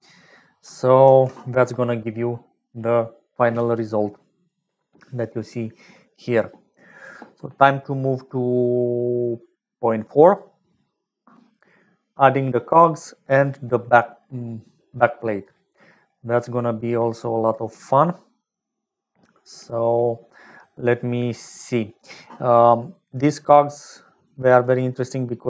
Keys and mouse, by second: 1.1 ctrl+s, 22.8 click, 23.6 click, 24.2 click.